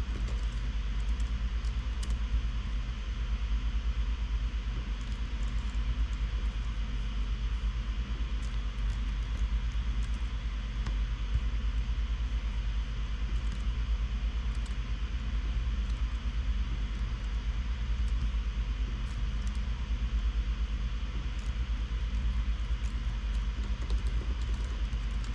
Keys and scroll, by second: 0.4-1.5 typing, 2.3 Up, 2.5 Return, 5.7 shift+super+Page_Down, 6.0 super+c, 6.3 shift+super+[, 6.8 super+v, 9.4 shift+super+Right, 9.8 alt+shift+Left, 10.3 alt+shift+Right, 10.6 super+x, 11.1 Right, 11.3 Up, 13.9 super+x, 15.1 super+z, 16.5 super+x, 17.5 super+., 18.5 Return, 19.6 super+., 19.9 Return, 22.1 alt+Left, 22.7 alt+shift+Right, 22.9 alt+shift+Right, 23.4 alt+shift+Right, 23.8-25.3 typing.